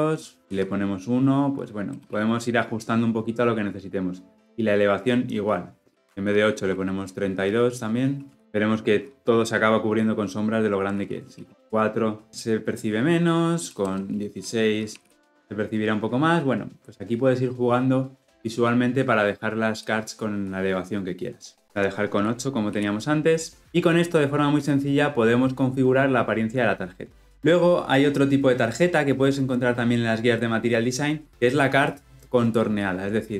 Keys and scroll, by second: 21.6 ctrl+z.